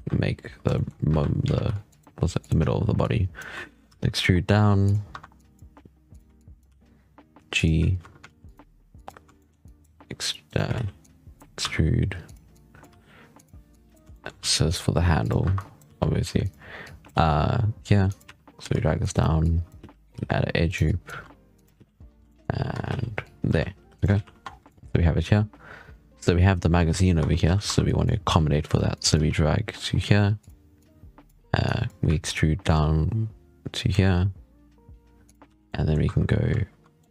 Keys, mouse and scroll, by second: 0.6 shift+middle click, 0.8 scroll up 3, 1.0 1, 1.4 ctrl+r, 2.9 click, 3.5 shift+middle click, 3.7 e, 5.0 1, 5.2-5.5 drag, 5.5 g, 6.2 click, 6.5 g, 8.1 ctrl+r, 9.2 shift+middle click, 9.5 click, 9.8 e, 10.6 ctrl+z, 10.9 drag, 11.5 e, 12.4 click, 12.7 g, 13.6 click, 14.0 shift+middle click, 14.3 e, 15.3 1, 15.4 click, 15.7 g, 16.7 click, 17.0 g, 18.2 z, 18.6 ctrl+r, 19.3 click, 19.7 z, 20.0 g, 20.7 click, 21.0 g, 21.7 z, 21.9 Tab, 22.0 scroll down 4, 22.2 shift+middle drag, 22.4 scroll up 4, 22.6 Tab, 22.8 z, 23.1 click, 23.4 g, 24.0 z, 24.2 Tab, 24.3 scroll down 6, 24.6 shift+middle drag, 24.7-25.1 scroll up 7, 25.3-25.6 scroll down 3, 27.1 Tab, 27.4 z, 27.7 click, 28.2 g, 28.8 click, 29.1 g, 30.7 click, 31.5 drag, 32.0 e, 35.3 z, 35.5-35.9 middle drag, 35.9 2, 36.8-37.1 middle drag.